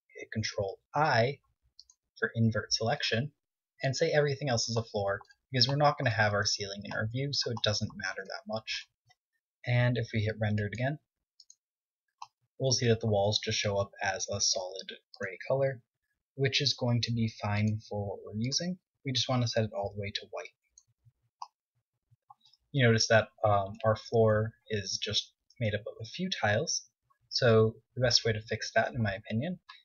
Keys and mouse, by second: 1.6 ctrl+i, 7.6-9.4 middle drag, 9.4 Tab, 16.9 click, 19.1-21.4 drag, 22.9 click, 26.5 Tab, 28.2 z.